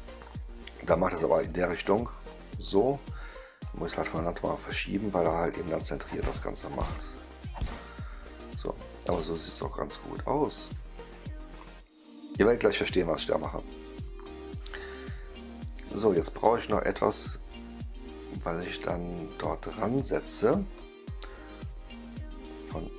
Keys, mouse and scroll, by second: 1.3 click, 2.2 click, 2.6 click, 3.6 click, 5.2-7.3 drag, 7.8 click, 8.4-19.1 right drag, 16.7 click, 20.4 click, 20.4-22.9 right drag.